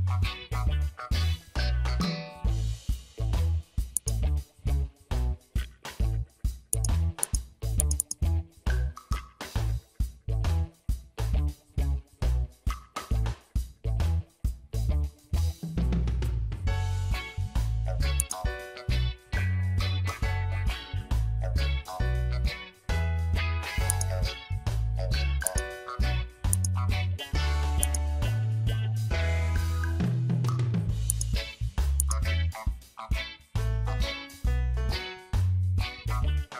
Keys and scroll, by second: 1.6 ctrl+d, 5.7 ctrl+g, 10.0 space, 11.4 shift+7, 11.9 space, 13.9 Return.